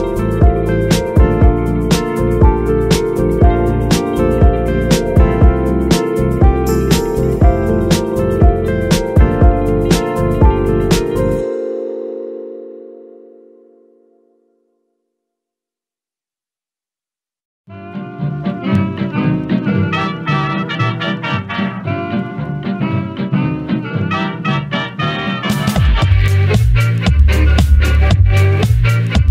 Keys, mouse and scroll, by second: 2.2 Down, 4.3-9.1 drag, 9.8-10.1 scroll down 3, 10.1-10.5 middle drag, 10.5 g, 12.2 click, 12.7-15.3 middle drag, 15.3 shift+a, 15.7 ctrl+alt+KP_0, 16.3 n, 17.8-18.1 drag, 18.1 n, 18.5-19.0 middle drag, 19.0 scroll up 2, 19.2-21.0 middle drag, 21.2-24.2 middle drag, 24.2 scroll down 1, 24.5 shift+middle click, 25.0-25.4 scroll up 2, 25.4 scroll down 3, 25.7 middle click, 26.1 scroll up 2, 28.1 click, 28.4 g, 28.7-29.3 right drag.